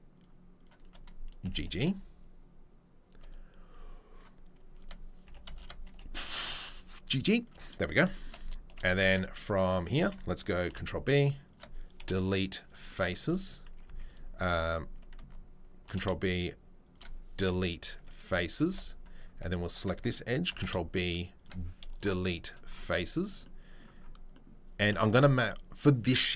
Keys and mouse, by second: 0.1 shift+click, 1.4 g, 4.1 right click, 4.5-11.6 shift+middle drag, 5.2 g, 9.7 alt+click, 10.7 ctrl+b, 12.0 Delete, 15.8 ctrl+b, 17.4 Delete, 18.5 ctrl+r, 20.5 ctrl+b, 21.5-26.3 middle drag, 22.0 Delete, 24.9 Tab.